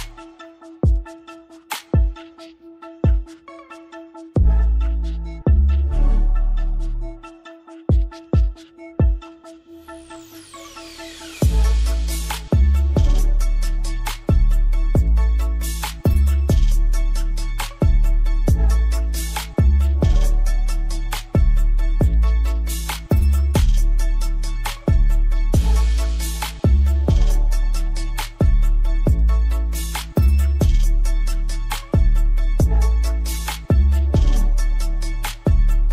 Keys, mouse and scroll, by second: 6.9 click, 10.4-11.1 scroll down 1, 11.2-11.8 scroll up 1, 13.8 click, 18.8 ctrl+c, 19.0 ctrl+v, 19.6 typing, 20.0 click, 21.4 scroll down 1, 21.7 scroll up 1, 22.7 scroll up 1, 22.9 ctrl+c, 23.1 typing, 24.2 click, 25.3-25.9 scroll down 1, 26.1 scroll up 1, 26.9 shift+click, 27.8 shift+click, 28.7 click, 30.2 scroll down 1, 33.6 click.